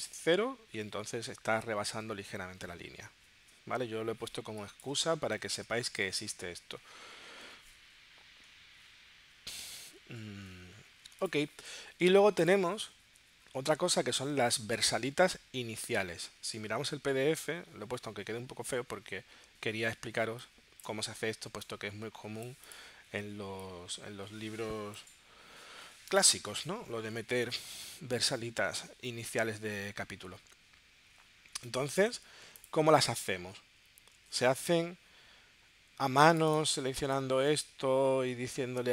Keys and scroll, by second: 5.4 0, 20.1 space.